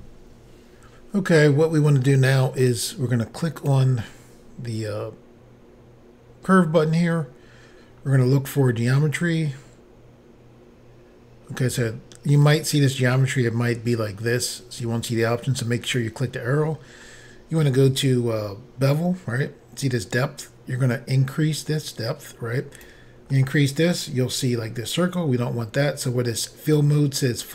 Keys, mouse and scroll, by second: 3.6 click, 3.7 click, 8.0 scroll down 2, 8.7 scroll down 2, 12.5 click, 12.6 click, 15.9 click, 16.0 click, 17.0 scroll down 2, 20.9 click, 23.4 middle click.